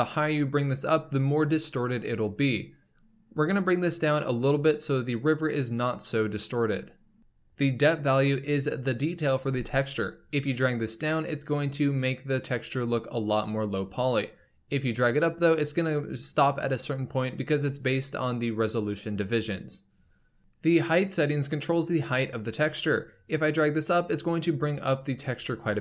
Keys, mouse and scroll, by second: 10.0-13.1 drag, 22.9-25.8 drag.